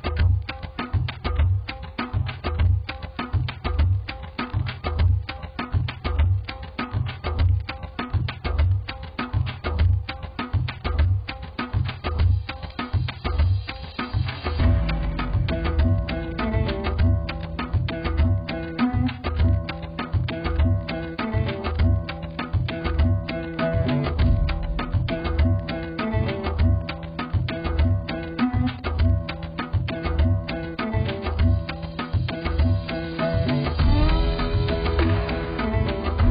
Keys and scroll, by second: 25.8 x, 33.8 x.